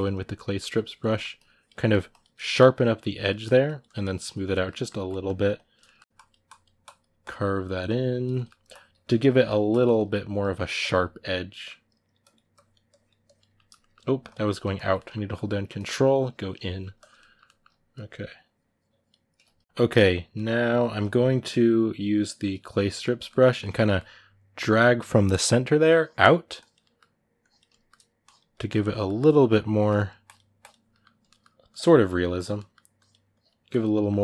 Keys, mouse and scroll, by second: 0.6 ctrl+click, 0.8 middle click, 1.1 ctrl+click, 1.5 middle click, 1.9 ctrl+click, 2.2 shift+middle click, 2.5 ctrl+click, 3.0 middle click, 3.5 shift+click, 4.3-5.3 ctrl+middle drag, 5.3 ctrl+click, 5.6 shift+middle click, 6.0-8.1 ctrl+drag, 8.1 middle click, 8.5 ctrl+click, 9.1 middle click, 9.4 ctrl+click, 9.7 shift+middle click, 10.6 ctrl+click, 11.3 middle click, 12.0-13.3 drag, 13.3 shift+middle click, 14.0 ctrl+click, 14.7 middle click, 15.1-16.4 ctrl+drag, 16.4 middle click, 16.7 ctrl+click, 16.9 middle click, 17.7-19.6 ctrl+drag, 19.6-22.3 ctrl+middle drag, 22.3 click, 22.6-25.6 middle drag, 25.6 click, 26.6 middle click, 27.2 click, 27.5 shift+middle click, 28.0 click, 28.7 middle click, 29.1-30.7 drag, 30.7 middle click, 31.5 click, 31.7 middle click, 32.1 click, 32.3 middle click, 32.7 click, 33.7 middle click.